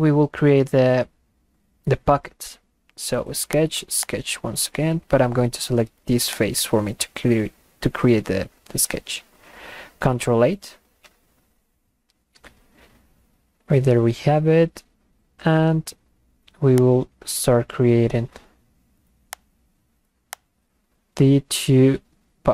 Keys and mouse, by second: 3.6 click, 4.0 click, 6.3 click, 11.4 ctrl+8, 16.8 click, 19.4 click, 20.3 click.